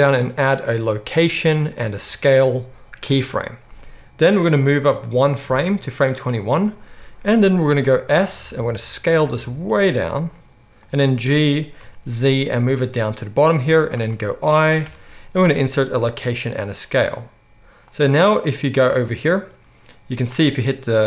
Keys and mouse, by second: 8.1 s, 9.6-17.8 middle drag, 9.6 s, 11.3 g, 14.8 i, 17.8-21.0 drag, 20.4 space.